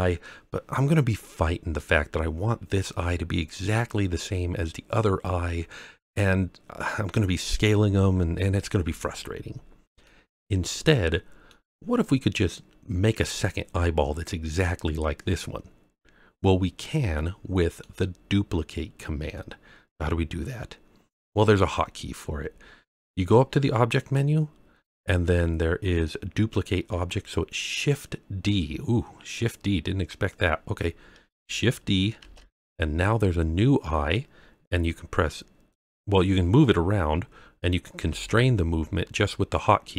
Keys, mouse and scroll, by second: 10.0-11.4 middle drag, 16.3-17.8 middle drag, 23.9-30.3 drag, 32.1 shift+d, 37.9 x.